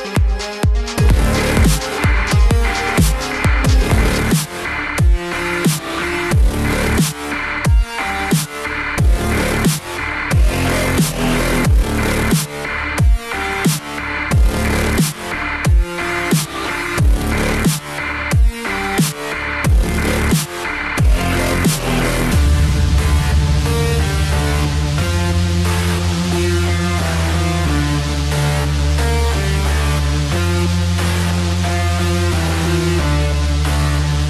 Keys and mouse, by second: 2.8 z, 4.7 click, 7.1 g, 11.3 click, 13.4 middle click, 17.8 middle click, 22.7 alt+click, 24.3 right click, 26.4 click, 27.3 middle click, 29.7 s, 32.7 click, 33.1 middle click.